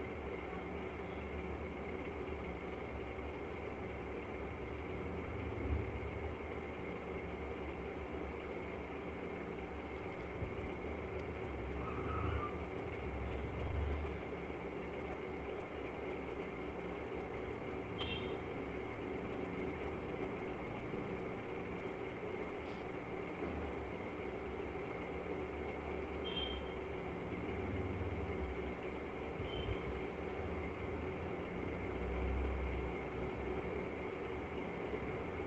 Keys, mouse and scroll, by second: 0.4 click, 2.7 click, 4.1 click, 11.2 right click, 13.7 click, 16.0 alt+click, 16.3 click, 18.6 right click, 19.3 click, 21.1 click, 22.7 click, 25.6 click, 27.2 click, 29.6 click, 31.7 click, 32.7 click, 33.5 click, 34.1 click, 34.6 click, 35.2 click.